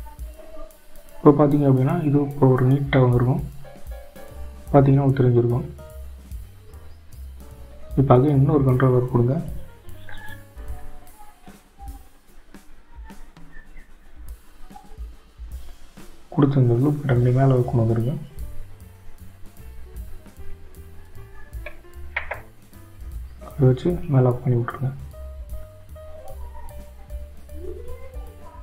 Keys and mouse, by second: 3.7-6.8 drag, 6.8-8.2 middle drag, 22.9 ctrl+r.